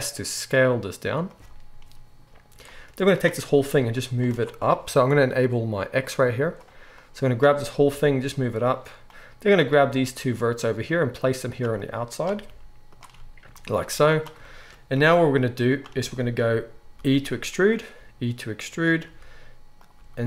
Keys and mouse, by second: 1.2-4.4 right drag, 2.6-8.7 drag, 2.6-4.4 middle drag, 3.5 g, 7.9 g, 8.7 middle click, 9.0-11.5 drag, 9.8 g, 11.5 middle click, 11.7-13.0 drag, 12.4 g, 13.0-14.0 middle drag, 14.0-15.8 drag, 15.0 g, 15.8-20.2 shift+middle drag, 16.9 e, 17.9 e, 19.0 e, 19.9 e.